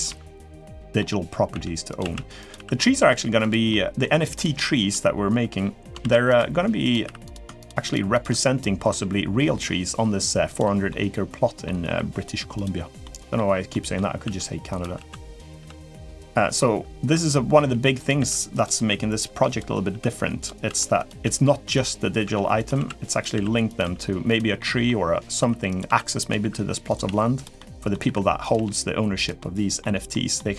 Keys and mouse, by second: 0.4 middle click, 1.3 e, 1.8 s, 2.3 r, 2.7 g, 3.5 middle click, 5.9 ctrl+r, 6.8 3, 7.0 click, 7.9 shift+click, 8.2 middle click, 10.7 middle click, 11.6 r, 12.8 middle click, 13.5 middle click, 14.0 e, 14.7 s, 15.3 g, 16.0 middle click, 17.3 g, 17.9 e, 18.5 s, 19.7 r, 20.4 s, 21.0 g, 22.0 e, 22.5 s, 23.1 r, 23.6 g, 24.3 middle click, 25.5-28.3 typing, 27.3 middle click, 29.1 middle click, 29.9 middle click.